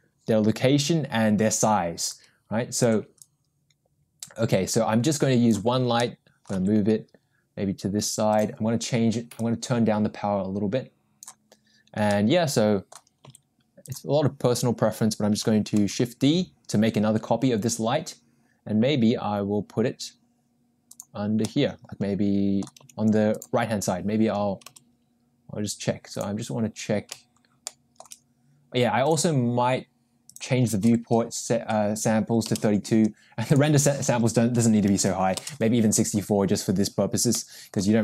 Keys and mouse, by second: 2.1 click, 3.4-6.2 drag, 6.2 middle click, 6.6 g, 9.5-11.2 drag, 12.9 middle click, 13.2 g, 16.0 shift+d, 21.5-23.4 middle drag, 23.4 g, 24.9 g, 30.4-33.1 drag, 35.4 click, 37.7 middle click.